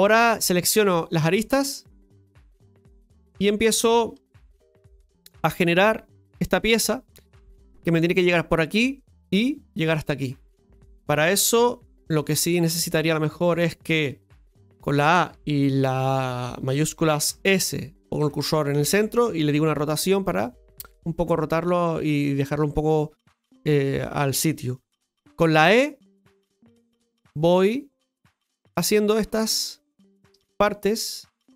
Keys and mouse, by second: 14.7 a, 23.5 right click.